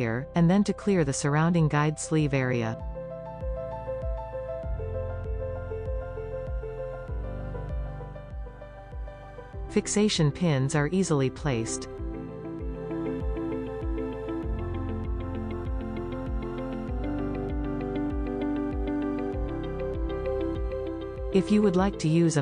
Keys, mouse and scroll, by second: 0.3 click, 1.8 click, 3.0-3.4 scroll down 1, 3.4-4.1 middle drag, 4.1-4.7 scroll up 1, 4.7 click, 5.3-6.2 middle drag, 6.2 s, 7.9 click, 7.9 right click, 12.7 click, 12.7-14.1 middle drag, 12.7 right click, 14.7 scroll down 1, 15.5-18.4 drag, 18.4-18.9 scroll down 2, 18.9-20.6 middle drag, 20.6 click.